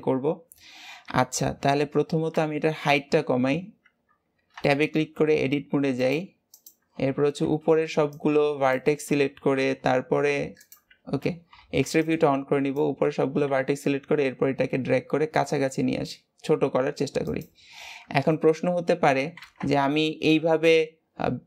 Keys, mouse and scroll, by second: 3.8 Tab, 4.6-5.8 shift+middle drag, 5.8 click, 6.4 click, 7.1 alt+z, 7.8 b, 10.8 alt+z, 11.4 b, 19.3 ctrl+z, 19.7 Tab.